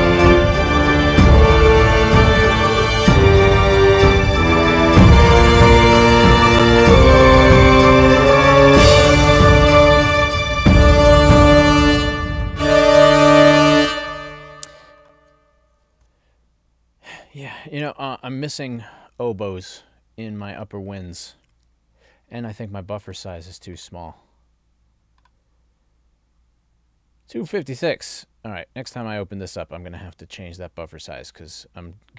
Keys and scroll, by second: 13.8 space, 16.0 ctrl+alt+l.